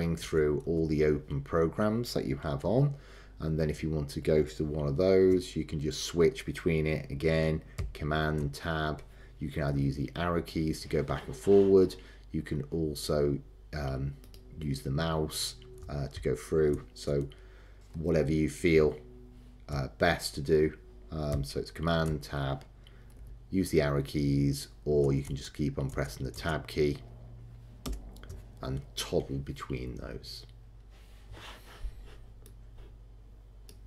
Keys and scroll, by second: 2.7 super+Left, 8.4 super+Tab, 16.7 super+Tab, 18.2 super+Right, 22.1 super+Tab, 25.2 super+Tab, 27.8 super+Return.